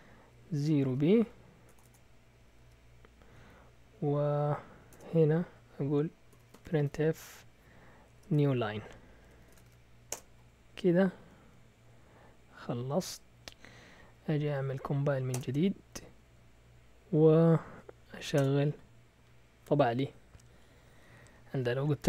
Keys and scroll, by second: 0.0-2.9 typing, 4.4 Down, 4.9 Return, 6.1-10.0 typing, 9.2 Escape, 10.1 Return, 11.2 Up, 11.4 Up, 14.3 Up, 15.3 Return, 16.0 Up, 16.2 Up, 17.6 Up, 18.3 Return.